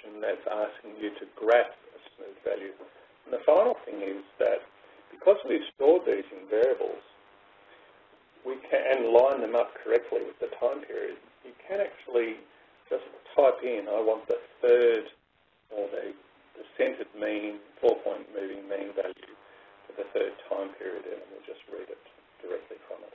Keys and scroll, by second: 13.9 (, 14.5 3, 15.5 (, 15.9 Return.